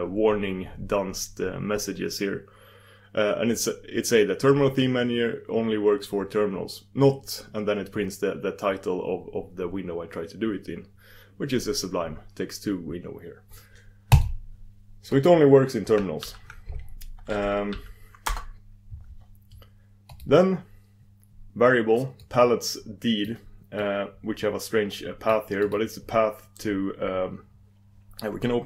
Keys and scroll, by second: 15.1 super+d, 16.2 super+d, 20.1 super+d.